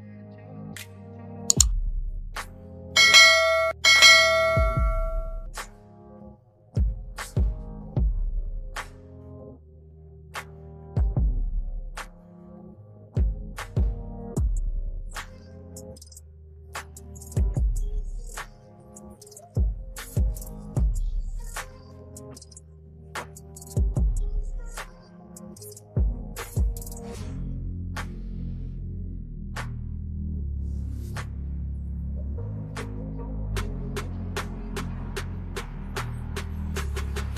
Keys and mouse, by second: 0.0 Return, 2.7 ctrl+KP_0, 4.7 ctrl+h, 6.0 Up, 7.1 Down, 8.5 Down, 10.1 click, 10.8 Right, 11.1 Up, 11.6 Down, 13.0 click, 14.9 KP_9, 15.3 KP_Enter, 16.9 Right, 19.5 Down, 20.7 Return, 21.3 ctrl+h, 22.0 ctrl+h, 25.7 t, 27.2 click, 28.5 KP_0, 28.9 KP_5, 29.2 KP_0, 31.0-33.1 typing, 35.3-37.3 typing.